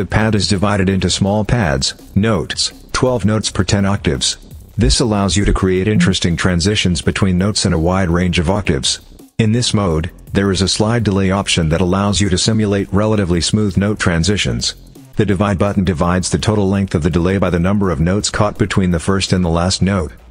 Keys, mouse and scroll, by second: 1.9 click, 3.2 click, 4.6 click, 5.2 click, 5.7 click, 16.8 click, 17.5 click, 18.5 click, 19.1 click, 20.2 click.